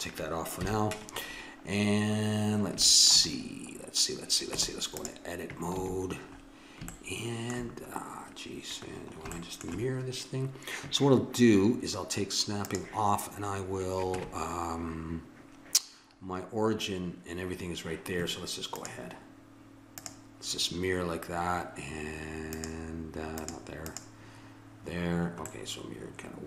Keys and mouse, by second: 0.6 KP_1, 4.5 Tab, 5.8 a, 12.6-14.3 drag, 14.1 Tab, 16.2 middle click, 18.8-21.2 drag, 22.5-25.6 drag, 25.6-26.4 middle drag.